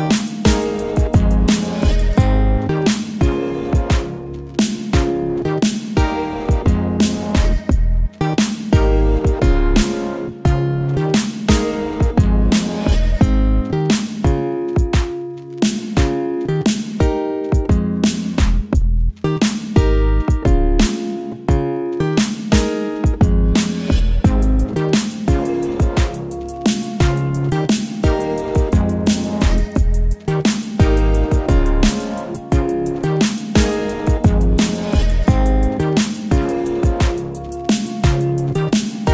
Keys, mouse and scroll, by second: 2.6-3.3 scroll up 1, 3.3 scroll up 2, 5.2 alt+scroll down 1, 6.2 ctrl+0, 7.2 click, 10.1 alt+Num_Lock, 10.5-14.1 alt+drag, 16.0-17.0 drag, 20.2-25.0 drag, 27.7-37.8 alt+drag, 30.7 alt+click, 37.8 alt+scroll down 1, 38.1 ctrl+z.